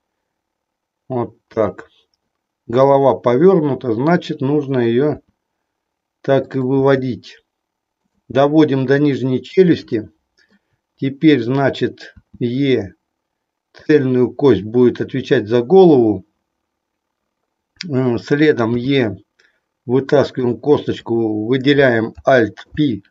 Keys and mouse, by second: 1.4 click, 5.2 e, 6.7 e, 7.9 click, 9.9 shift+middle click, 12.1 e, 13.8 click, 18.8 e, 22.6 alt+p.